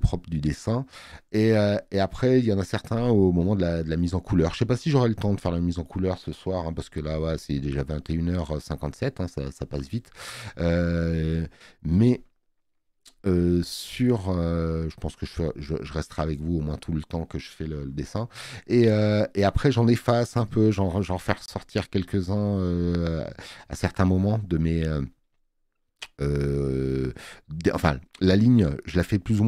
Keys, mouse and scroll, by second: 19.9 space, 20.3 click, 21.9 space, 22.1 click.